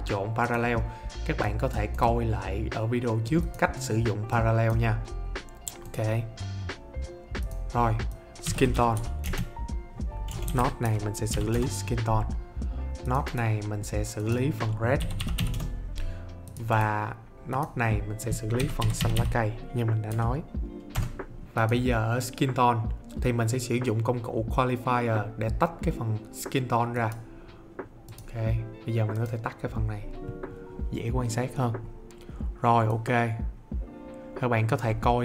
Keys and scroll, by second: 8.1-11.8 typing, 14.7-20.1 typing, 20.9 Return.